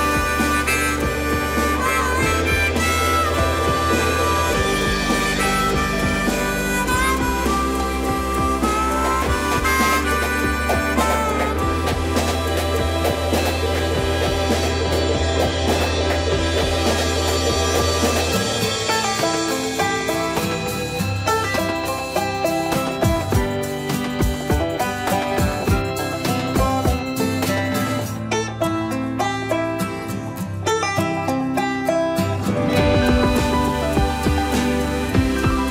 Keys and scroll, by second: 22.2 shift+space.